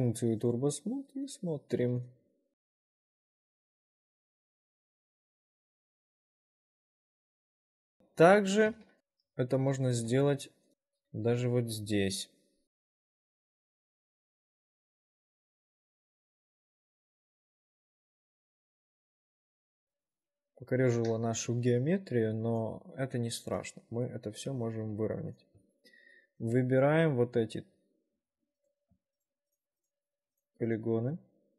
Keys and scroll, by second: 2.0 w, 4.0 w, 6.7 4, 16.2 shift+5, 17.2 w, 18.2 ctrl+r, 23.2 w, 24.7 1, 28.4 4.